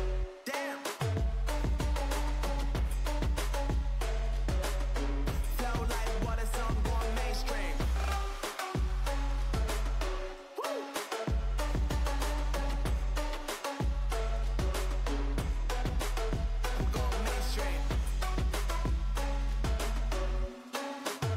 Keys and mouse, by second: 8.8-11.7 right drag, 9.7 x, 12.8-13.9 right drag, 13.9 x, 16.4 z, 17.0 z, 18.5 z, 19.0 z, 21.0 x.